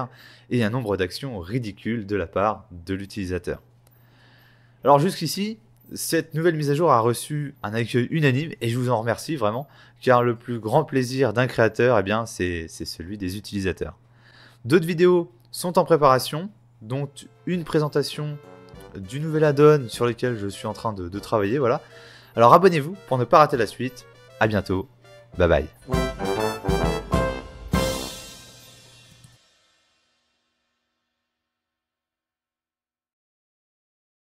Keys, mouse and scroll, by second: 0.7 scroll down 1, 2.0 typing, 3.4 x, 3.6 scroll down 4, 4.0 shift+middle click, 5.9 right click, 6.9 alt+a, 6.9 scroll down 2, 8.4 middle click, 9.4 shift+middle click, 9.7 middle click, 11.2-11.8 scroll up 2, 11.8 f, 12.3 click, 12.7 right click, 13.5 Escape, 13.9 right click.